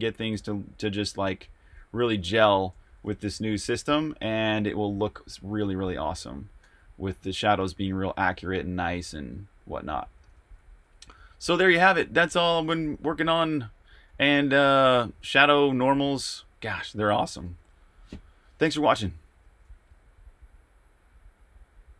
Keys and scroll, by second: 0.0-0.9 typing, 2.0-8.7 typing, 10.1-16.0 typing, 17.7-18.5 typing, 19.4 super+q.